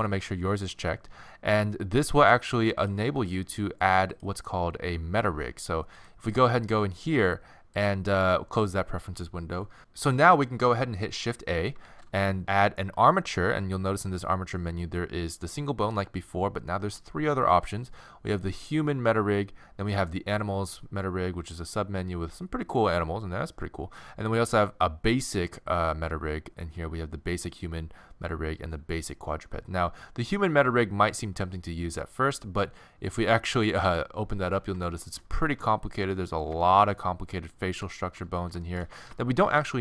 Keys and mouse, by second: 7.8-9.8 drag, 11.9 shift+a, 34.5 middle click, 35.4 middle click, 36.1-38.1 middle drag, 39.1 middle click.